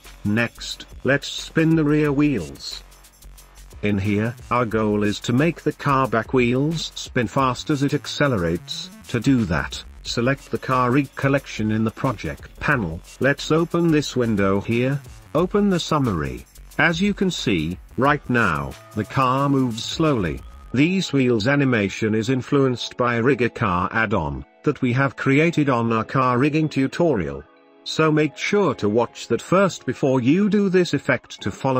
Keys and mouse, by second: 0.7-2.4 drag, 3.1 shift+middle click, 4.0 ctrl+s, 5.7 click, 6.9-7.7 drag, 10.2-10.8 middle drag, 12.9-14.9 drag, 15.7 click, 18.0-18.4 shift+middle drag, 18.7 space, 20.4 space, 21.5 space, 23.0 space, 24.1 space, 25.6 space.